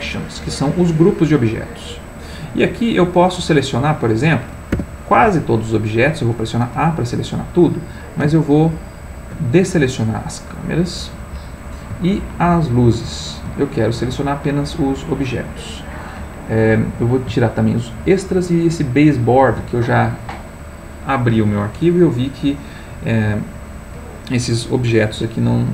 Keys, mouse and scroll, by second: 0.0 click, 4.7 a, 8.6 ctrl+click, 12.7 ctrl+click, 17.9 ctrl+click, 19.0 ctrl+click.